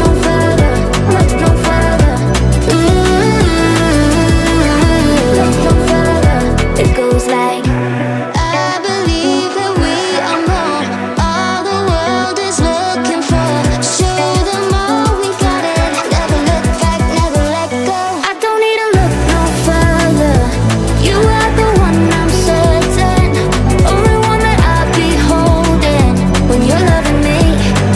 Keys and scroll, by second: 1.1 space, 4.7 space.